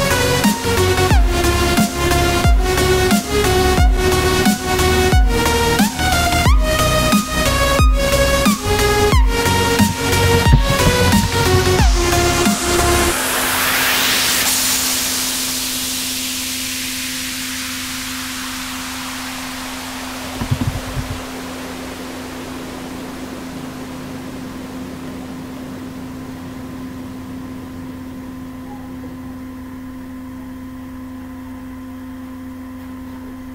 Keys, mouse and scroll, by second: 16.4 click, 17.0 F1, 17.0 click, 24.0 F1.